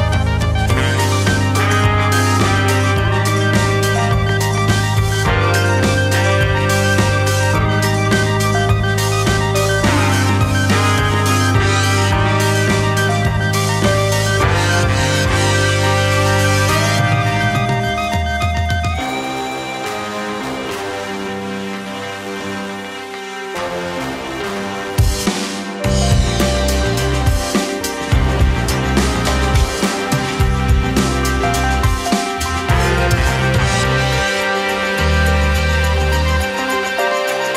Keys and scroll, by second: 13.2 KP_5, 23.6 space, 28.3 space, 30.2 2.